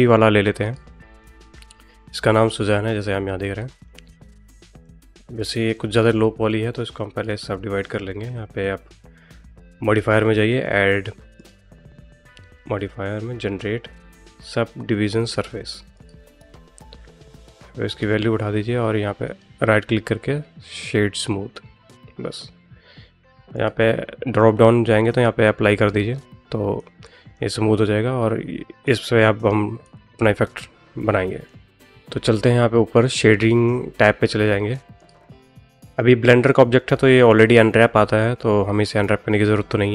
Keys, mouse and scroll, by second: 1.1 middle click, 3.6 middle click, 4.0 shift+middle click, 4.4 middle click, 5.4 shift+middle click, 5.8 middle click, 7.7 click, 11.2-16.0 drag, 17.7 click, 19.1-21.1 drag, 23.4-25.9 drag, 26.6 middle click, 27.6-28.7 middle drag, 29.7-31.3 middle drag.